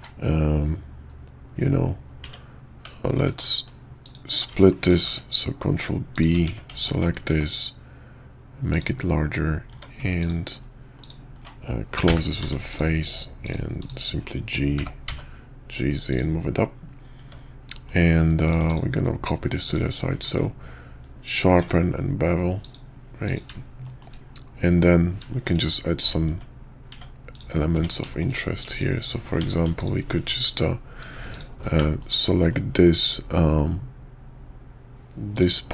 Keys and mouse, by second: 4.0 alt+click, 4.9 ctrl+b, 6.4 Tab, 6.8 alt+click, 7.3 s, 9.7 Tab, 10.2 alt+click, 11.0 alt+click, 12.0 f, 12.4 Tab, 12.7 click, 13.4 click, 13.8 click, 14.7 g, 17.2 Tab, 17.7 middle click, 18.4 click, 18.6 x, 19.6 click, 20.1 q, 21.6 q, 23.8 shift+middle drag, 24.8 middle click, 25.3 shift+middle drag, 25.9 click, 26.3 Tab, 26.9 Tab, 27.3 click, 27.7 Tab, 28.1 shift+middle click, 29.4 Tab, 29.8 alt+click, 31.3 alt+click, 31.8 shift+click, 32.5 middle click, 35.3 ctrl+click.